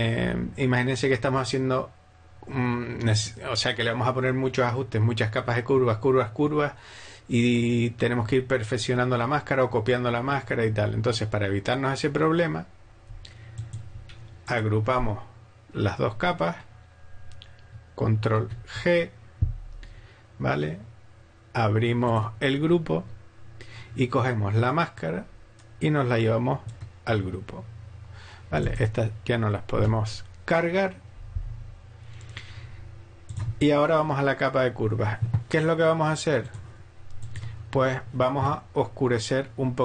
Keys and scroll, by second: 18.3 ctrl+g, 29.8 BackSpace.